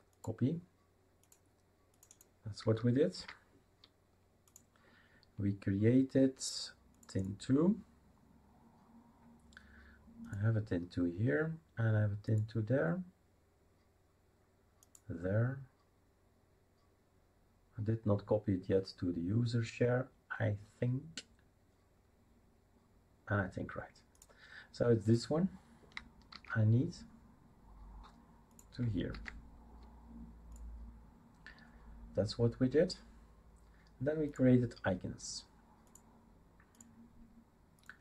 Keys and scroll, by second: 3.2 ctrl+v, 26.3 ctrl+c, 29.1 ctrl+v.